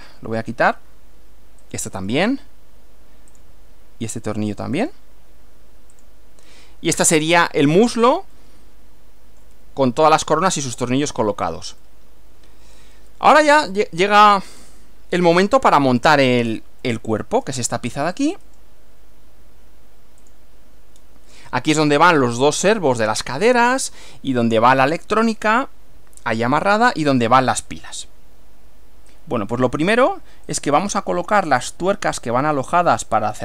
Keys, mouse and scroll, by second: 1.7 click, 2.1 right click, 3.3 click, 4.5 click, 4.8 right click, 6.0 click, 7.7-9.7 shift+middle drag, 10.5-11.7 middle drag, 11.9-13.0 middle drag, 13.1-14.5 middle drag, 14.5 shift+scroll up 1, 16.9 shift+middle click, 18.2 click, 18.5 right click, 20.3 click, 21.0 scroll down 1, 21.5-22.3 scroll down 1, 29.1-30.1 drag, 30.5 click, 30.9 right click.